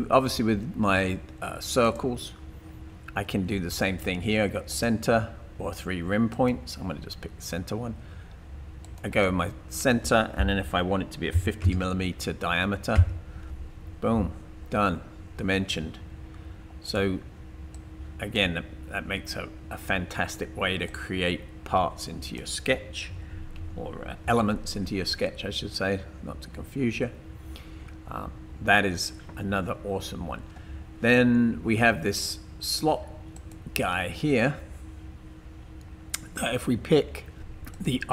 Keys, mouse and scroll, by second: 1.8 click, 11.4 typing, 12.9 Return, 15.1 typing, 21.0 click, 23.1 typing, 23.6 Delete, 37.7 click.